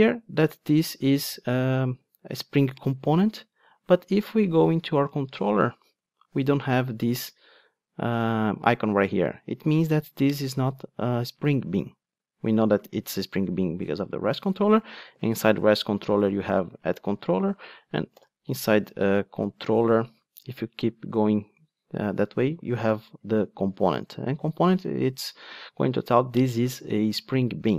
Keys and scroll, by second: 4.8 Right, 15.1 super+b.